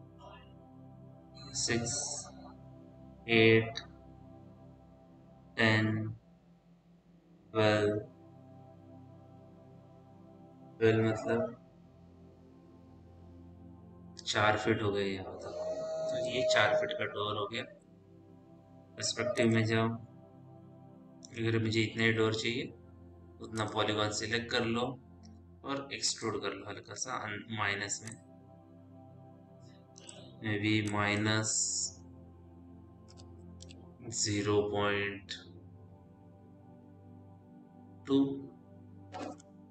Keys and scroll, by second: 18.7 p, 32.4-34.7 typing, 39.5 KP_2.